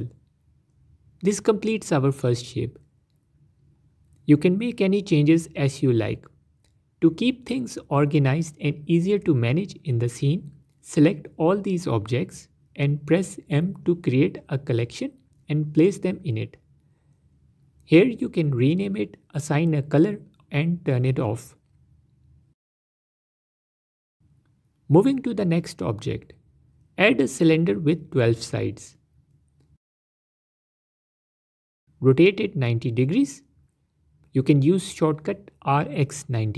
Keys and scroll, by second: 0.0 s, 11.7 m, 25.5 shift+a, 30.4 z, 33.6 r, 33.9 x, 34.1 KP_9, 34.2 KP_0, 35.1 KP_Enter.